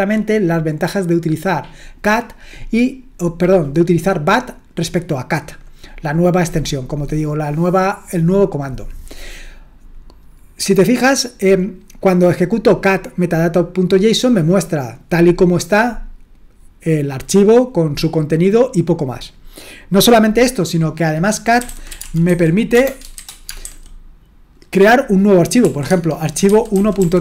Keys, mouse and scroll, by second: 21.4-23.7 typing, 25.6-27.2 typing, 25.9 Tab.